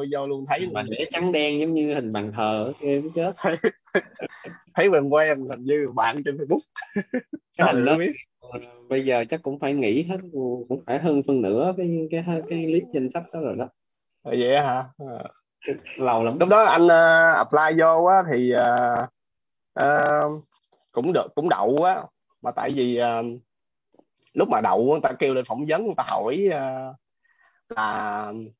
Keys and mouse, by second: 19.4 click.